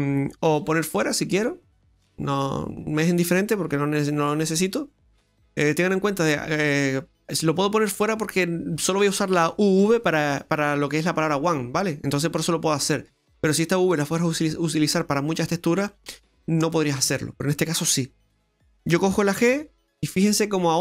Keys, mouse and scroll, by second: 0.5 g, 2.2 right click, 19.5 g.